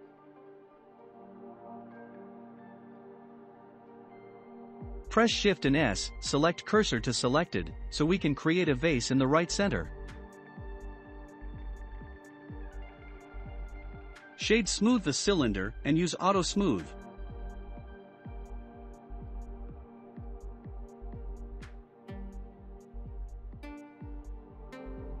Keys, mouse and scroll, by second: 0.8-1.8 shift+middle drag, 1.8 click, 2.9-4.4 middle drag, 4.4-4.9 scroll up 2, 5.7 shift+s, 8.5 shift+a, 12.7 s, 14.7-17.3 right drag, 17.3-22.5 drag, 23.1-23.4 scroll up 2, 23.4-25.2 middle drag.